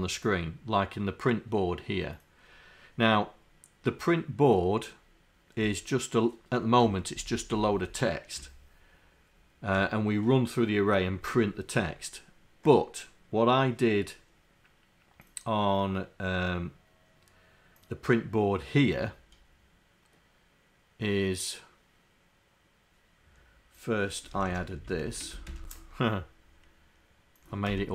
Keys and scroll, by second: 24.4 Home, 25.0 shift+Down, 25.5 ctrl+Insert.